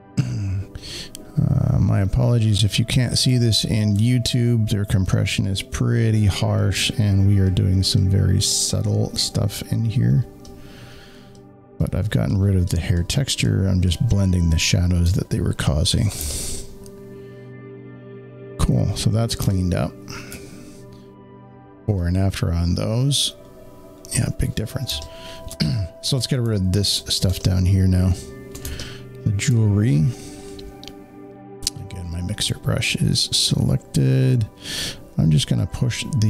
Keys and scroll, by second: 3.2 space, 3.3 space, 16.1 z, 16.1 space, 24.8 space, 24.9 space, 27.2 z, 28.5 space, 28.6 z, 28.7 space.